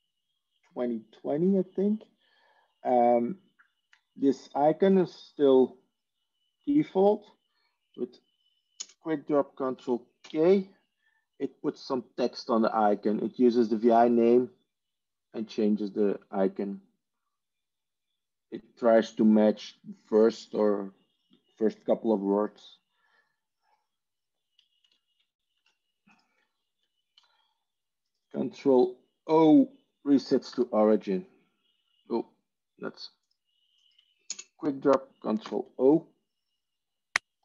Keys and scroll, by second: 9.6 ctrl+space, 10.1 ctrl+k, 24.7 ctrl+s, 25.5 alt+F4, 30.5 ctrl+o, 34.2 ctrl+space, 35.6 ctrl+o.